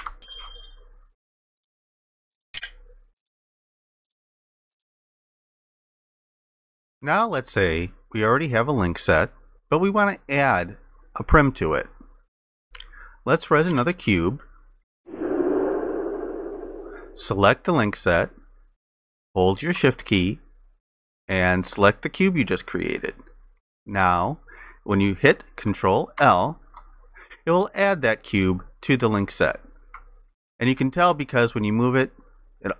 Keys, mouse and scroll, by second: 0.0 ctrl+shift+i, 22.5 shift+click, 26.2 ctrl+i, 30.5 alt+click.